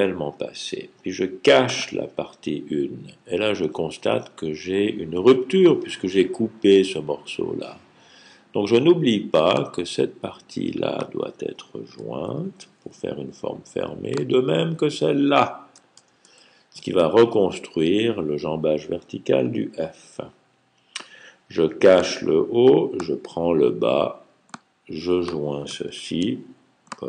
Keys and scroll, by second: 12.1 super+j, 15.9 super+j, 25.7 super+j.